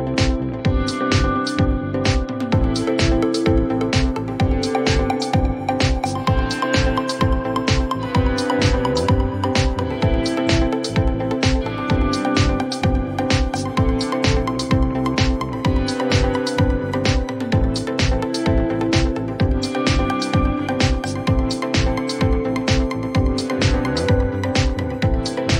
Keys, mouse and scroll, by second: 5.4 click, 9.4-12.7 drag, 12.9-13.4 scroll, 16.0 click, 16.8-18.5 typing, 17.4 click, 17.6 click, 20.7 click, 20.9 click.